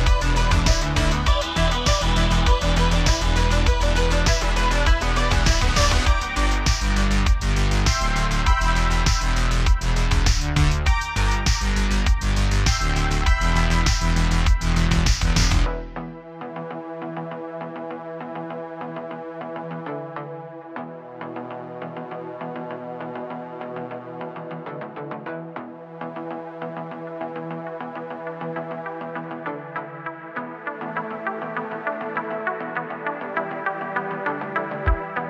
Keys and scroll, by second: 1.9 space, 2.0 super+z, 2.4 BackSpace, 3.0 super+z, 3.1 BackSpace, 3.4 space, 5.2-8.7 typing, 9.7-10.5 typing, 13.2 space, 15.1 space, 15.8 space, 17.0 super+z, 17.5-20.0 typing, 20.1 super+z, 20.4 super+z, 24.0 x, 26.3 space, 28.1 space, 28.8 BackSpace, 32.1 space, 32.4 super+z, 32.5 super+z, 33.2-33.7 typing, 33.9 super+z.